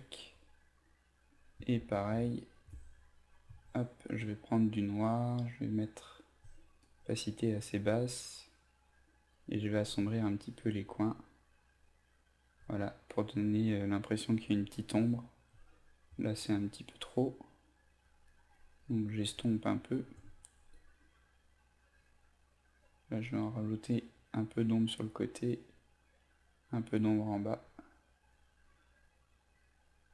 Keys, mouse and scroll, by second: 0.7 click, 1.8 ctrl+alt+z, 2.1 ctrl+alt+z, 3.4 d, 4.6-11.0 drag, 15.0 e, 15.8-19.3 drag, 20.6 b, 21.4 click.